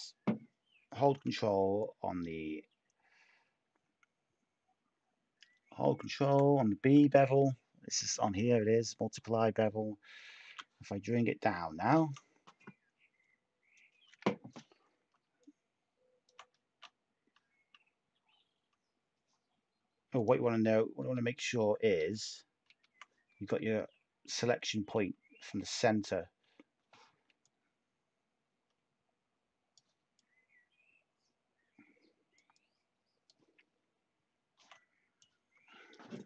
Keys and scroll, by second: 10.4 t, 20.9 ctrl+z, 21.9 ctrl+z, 22.7 ctrl+z, 26.4 b, 29.0 b.